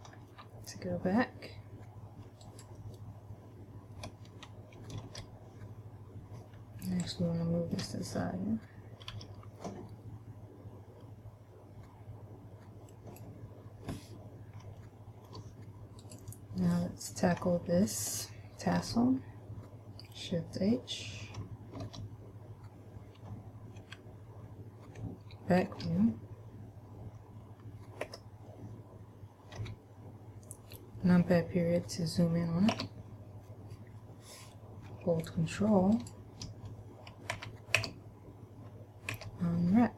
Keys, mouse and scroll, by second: 0.0-0.7 scroll down 3, 0.3-0.7 scroll up 1, 0.7-1.4 scroll down 1, 2.8 right click, 5.4 ctrl+l, 6.9 scroll down 1, 7.4 shift+middle click, 9.4 g, 13.4 click, 15.2 shift+middle click, 16.4 right click, 19.1 ctrl+l, 22.3 shift+h, 24.2 KP_1, 26.0 ctrl+KP_1, 28.4 Escape, 30.0 KP_Decimal, 33.1 a, 36.4 ctrl+right click, 37.7 a, 38.2 a, 39.4 u.